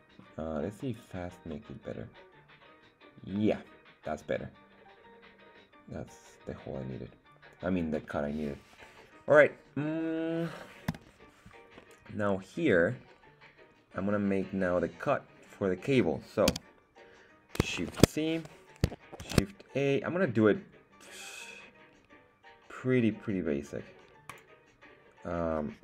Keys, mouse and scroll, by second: 0.9 click, 1.4-7.7 middle drag, 11.7-14.5 middle drag, 16.6 z, 17.8 shift+c, 19.2 shift+a.